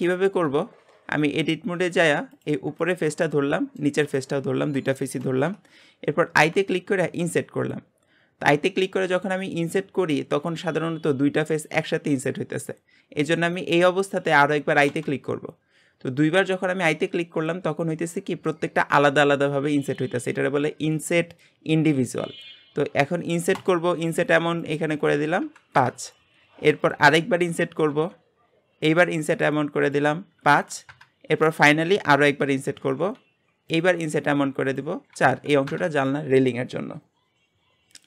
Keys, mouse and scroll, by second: 0.7-1.9 scroll down 1, 1.9 click, 2.3 click, 3.2 shift+middle click, 4.0 shift+click, 5.0-6.4 shift+middle drag, 24.6-27.6 drag, 29.8-32.9 drag, 34.7-37.8 drag.